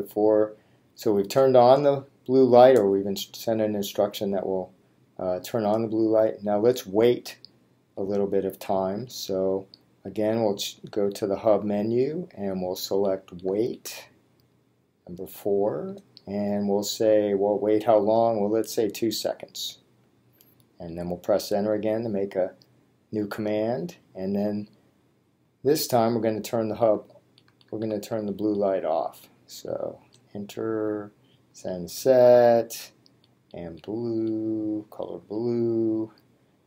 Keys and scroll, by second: 6.5 Menu, 11.7 8, 13.4 Down, 15.7 Return, 20.2 2, 21.7 Return, 25.6 Menu, 26.9 Down, 30.2 Return, 33.3 Down, 34.4 Down.